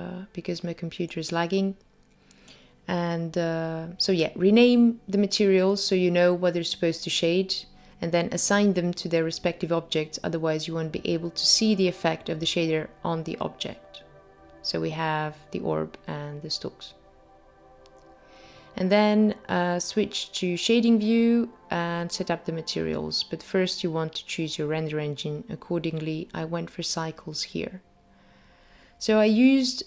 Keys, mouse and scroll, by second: 0.8 click, 1.4 click, 2.0 click, 2.2 click, 2.7 click, 3.2 click, 4.5 click, 5.4 click, 6.9 click, 8.0 click, 11.2 click, 13.2 click, 15.0-15.7 scroll down 7, 15.7 middle click, 18.2 click, 19.2-21.2 scroll up 10, 19.6 middle click, 21.7 click, 22.1 click, 24.6 click, 25.8-26.7 scroll down 2, 26.3 click, 27.2 click, 27.6 shift+a, 27.7 click, 28.3 s, 29.7 click.